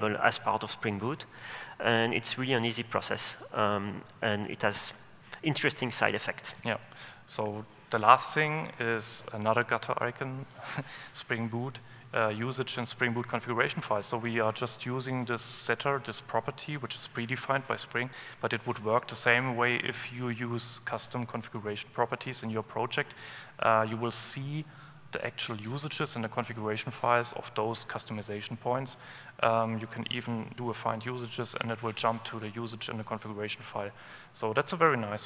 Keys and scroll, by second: 30.3 alt+super+F7.